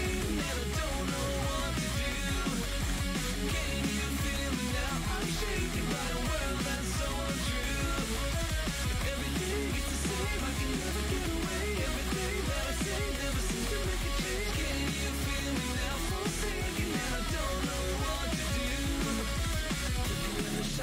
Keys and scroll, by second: 0.1 ctrl+z, 11.1 ctrl+z, 14.5 ctrl+z.